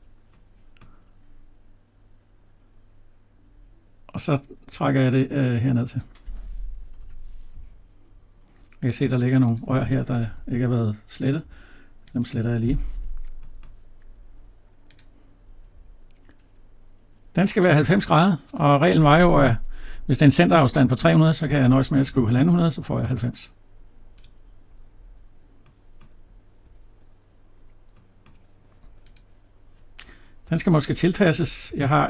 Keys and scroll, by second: 6.7 Escape, 10.2 Delete, 30.2 Right.